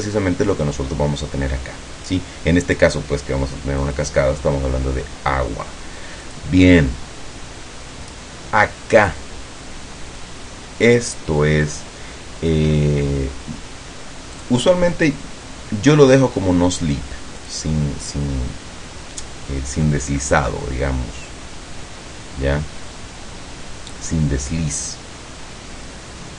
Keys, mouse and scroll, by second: 3.9 click, 6.4 click, 14.5 click, 17.5 click.